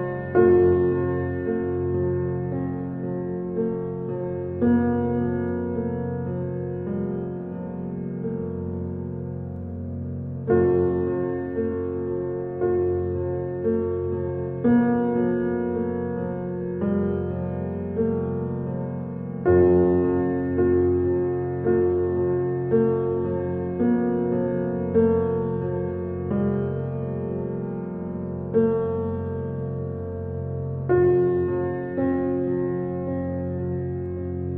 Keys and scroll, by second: 3.8 y, 11.0 s, 25.5 t, 25.6 e, 25.9 x, 26.0 t.